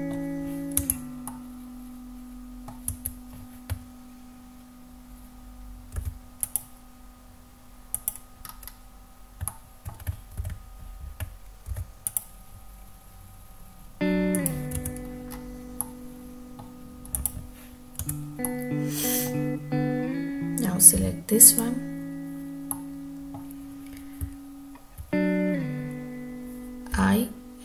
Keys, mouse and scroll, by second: 0.9 Tab, 1.4-2.8 middle drag, 3.2 Tab, 6.0 ctrl+r, 8.0 click, 8.7 scroll up 3, 9.6-10.0 shift+middle drag, 10.7 ctrl+z, 11.8 ctrl+r, 14.5 click, 14.9 Tab, 15.4 scroll down 1, 15.9-16.8 middle drag, 17.3 drag, 18.1 Tab, 18.5-19.4 middle drag, 21.1 3, 21.6 click, 22.8-23.5 middle drag, 24.3 `, 27.1 i.